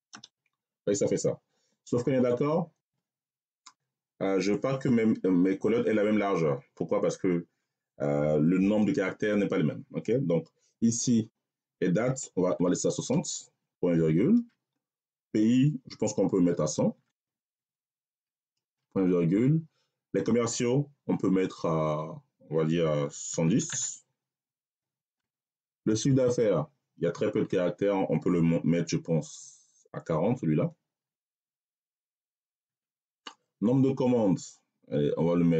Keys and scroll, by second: 0.0 Return, 12.4 6, 12.9 0, 14.2 ., 16.4 1, 16.8 0, 18.5 ., 23.1 1, 23.6 0, 24.9 ., 30.2 4, 31.0 0, 32.5 ..